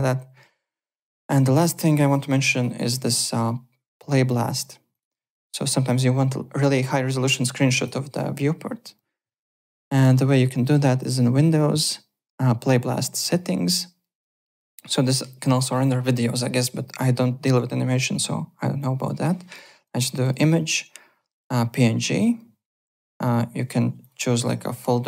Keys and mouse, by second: 1.5 click, 2.0 `, 2.0 click, 2.3 alt+middle click, 2.5 alt+right click, 2.8 alt+middle click, 2.9 alt+Tab, 4.0 click, 4.6 click, 5.3 alt+middle click, 5.4 alt+right click, 7.7 click, 9.7 click, 11.0 click, 13.2 click, 19.5 click, 20.2 click, 21.3 click, 23.0 click, 24.0 click.